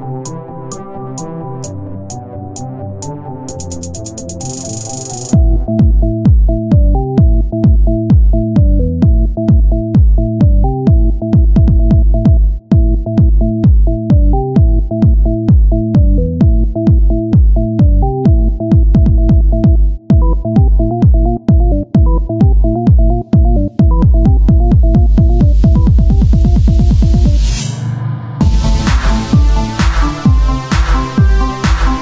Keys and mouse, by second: 1.2 e, 2.7 s, 4.6 click, 4.6 Tab, 5.2-7.1 drag, 7.1 z, 9.8 s, 14.8 r, 22.1 Tab, 22.9 Tab, 24.5-25.6 drag, 25.6 Tab, 27.1 ctrl+r, 29.9 ctrl+r.